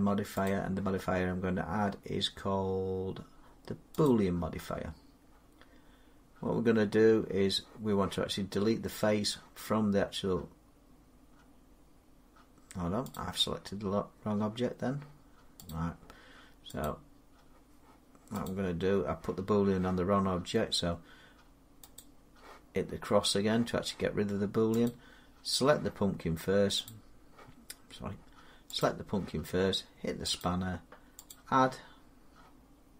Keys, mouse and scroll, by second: 0.3 click, 3.9 click, 13.3 click, 15.5 click, 16.7 click, 18.3 click, 21.8 click, 24.7 click, 26.7 click, 28.6 click, 30.2 click, 31.1 click.